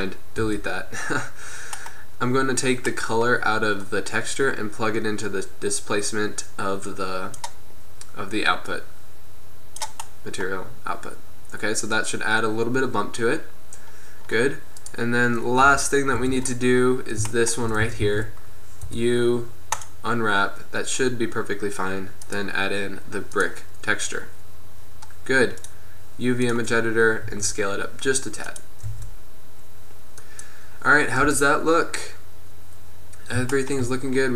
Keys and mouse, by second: 0.6 x, 5.9-7.5 drag, 10.3 click, 13.4-14.4 middle drag, 15.0 right click, 15.7 KP_1, 16.3 Tab, 18.0 a, 18.1 a, 19.0 u, 22.5-23.7 drag, 27.3-29.0 drag, 27.5 s, 29.0 Tab, 30.6 click, 31.3 KP_0, 31.9 click.